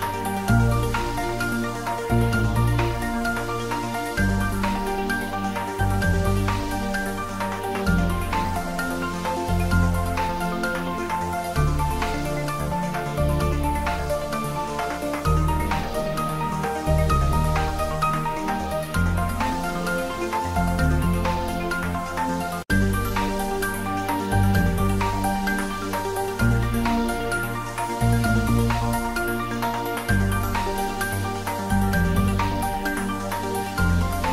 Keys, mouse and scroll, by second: 0.9-1.4 scroll up 1, 2.3 3, 2.9 shift+z, 4.2 z, 4.7 click, 5.0 shift+z, 6.3 click, 6.4 right click, 6.6 ctrl+z, 8.0-12.9 drag, 13.7 click, 15.0-15.3 scroll down 1, 15.3 middle click, 15.7 shift+z, 16.0 scroll up 1, 18.2 i, 19.8 click, 20.0 middle click, 20.6 g, 23.1 click, 23.3 Tab, 23.6-24.9 middle drag, 24.9 scroll down 1, 25.2 middle click, 25.8 Tab, 26.4 g, 27.6 click, 28.0 s, 28.8 click, 29.1 ctrl+z, 29.3 scroll up 1, 29.8 i, 30.7 click, 30.8 ctrl+z, 31.3-31.9 scroll down 1, 31.9 Tab, 32.1 scroll up 1, 32.3-34.1 middle drag, 34.1-34.3 scroll up 1.